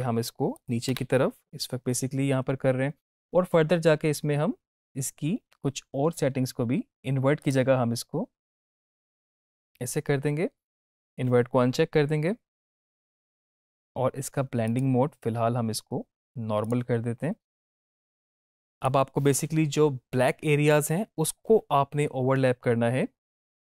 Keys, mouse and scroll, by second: 0.5 click, 7.3 click.